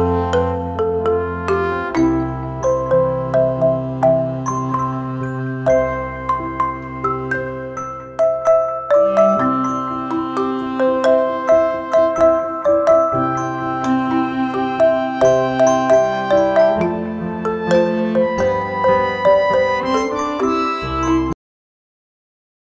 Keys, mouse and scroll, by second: 6.9-19.7 drag, 21.3 click.